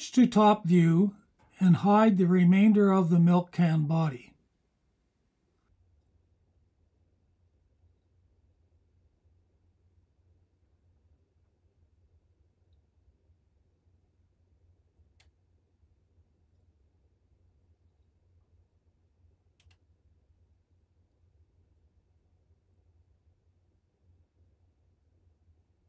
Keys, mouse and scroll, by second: 0.7 KP_7, 3.0 click, 3.7-7.4 drag, 9.0 h, 10.4 alt+super+click, 11.6-16.2 drag, 15.4 h, 16.7 super+click, 17.6-18.8 alt+drag, 19.7 click, 20.2 shift+click, 21.4 h, 22.4 click, 22.9 click, 24.9 h.